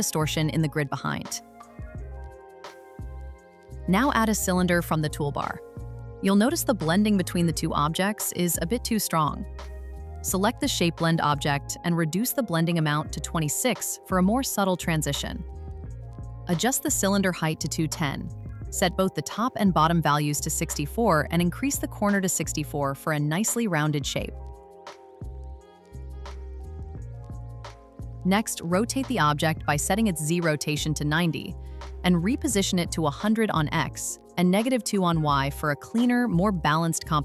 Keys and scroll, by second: 13.9 Return, 19.5 Return, 25.0 Return, 30.3 Return, 33.5 Return, 36.2 Return.